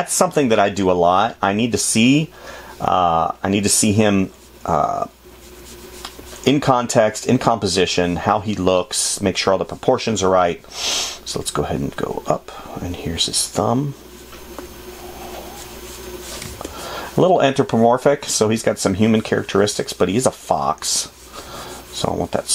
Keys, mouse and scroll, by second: 1.6 space, 10.6 space, 16.8 space.